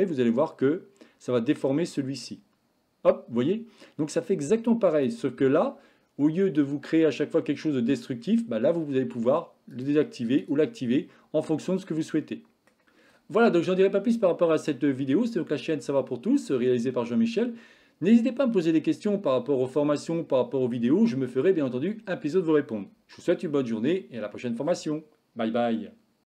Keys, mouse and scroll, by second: 9.8 click, 10.4 click, 11.6-12.8 middle drag.